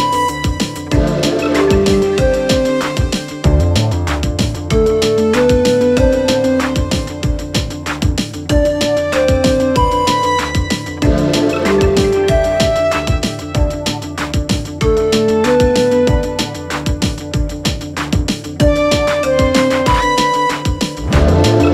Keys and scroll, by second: 9.5 Escape.